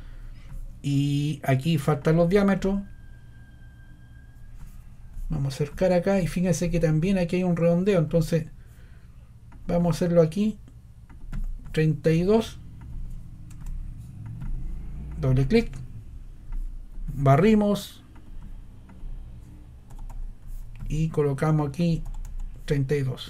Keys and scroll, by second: 19.6-20.5 typing, 22.0 3.